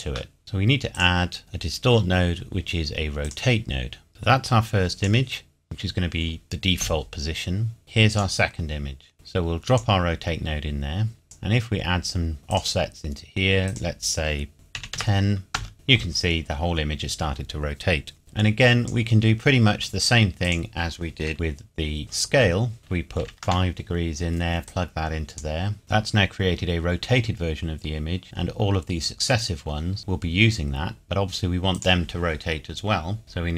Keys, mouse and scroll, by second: 0.9 click, 3.2 click, 7.8 click, 14.7 KP_1, 14.9 KP_0, 15.5 KP_Enter, 18.2 click, 22.8 click, 23.2 KP_5, 23.4 KP_Enter, 24.7 click, 25.8 middle click, 31.7 click.